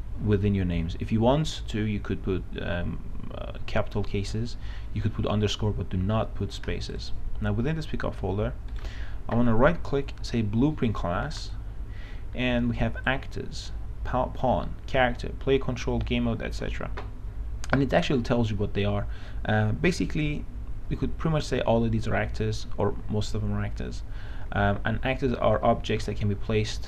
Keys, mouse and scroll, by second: 7.5 click, 9.0 right click, 11.7-14.2 drag.